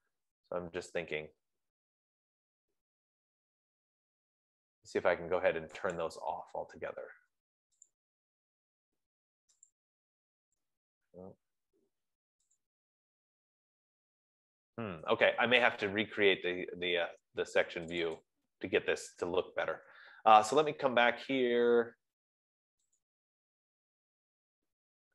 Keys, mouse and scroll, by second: 6.6 F15, 6.6 click, 8.3 click, 10.1 click, 13.1 click, 18.4 click, 19.4 click, 23.4 click.